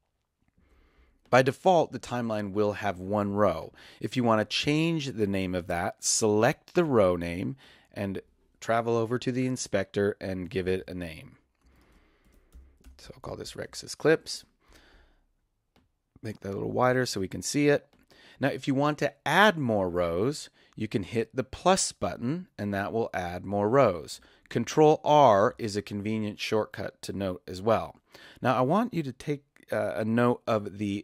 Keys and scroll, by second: 10.4-14.2 typing, 25.1 ctrl+r.